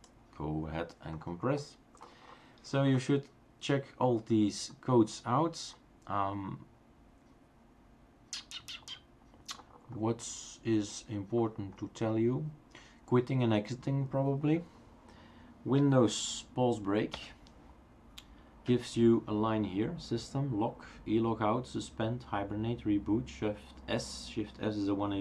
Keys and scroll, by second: 17.2 super+Pause.